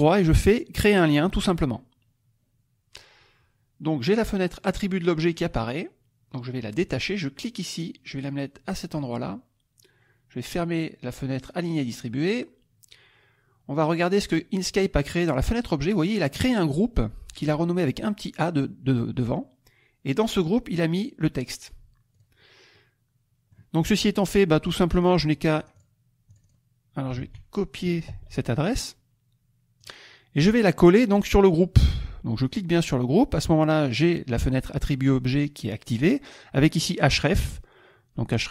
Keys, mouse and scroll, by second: 1.3 click, 7.1-9.1 drag, 19.1 click, 22.2 click, 22.7 middle click, 24.9 click, 26.3 click, 27.1 ctrl+a, 28.0 ctrl+c, 29.8 click, 32.4 click, 33.9 click, 38.4 click.